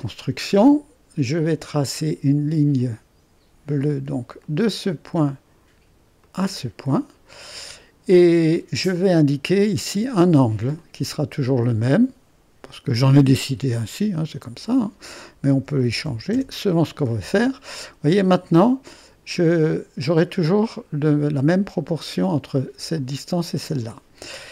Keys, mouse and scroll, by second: 4.5-5.6 drag, 6.3 click, 7.0 middle click, 10.1 click, 11.1-14.0 drag, 14.4-15.6 drag, 15.3-16.6 typing, 18.9-22.3 drag, 22.5 click.